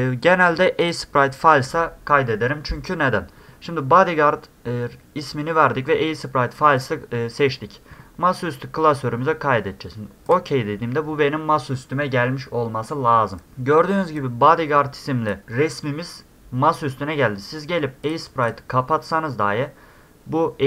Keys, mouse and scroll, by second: 0.8 click, 6.8 click, 10.3 click, 13.4 click, 14.2-15.3 drag, 18.0 click, 18.4 click.